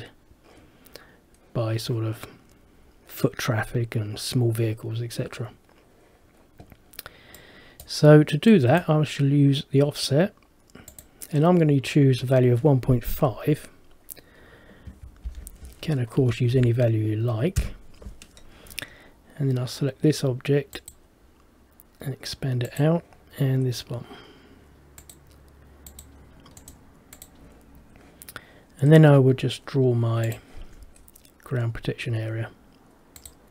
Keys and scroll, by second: 17.7 Return.